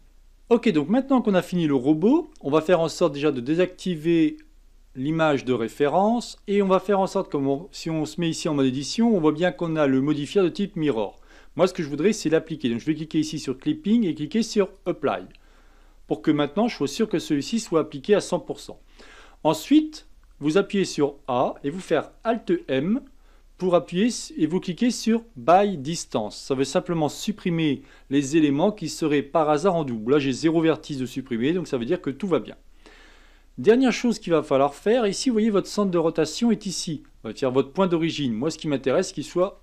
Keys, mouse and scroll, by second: 0.0 middle click, 2.3-5.2 shift+middle drag, 5.2 click, 7.7 Tab, 8.4-10.8 middle drag, 10.8 Tab, 13.3 click, 14.7 click, 15.6-16.7 middle drag, 16.7 Tab, 17.0-18.7 middle drag, 18.7 a, 19.1 a, 22.4 alt+m, 33.7 Tab, 34.3 middle click, 34.8-37.4 scroll up 1, 37.4-37.8 scroll up 1, 39.3-39.6 right drag.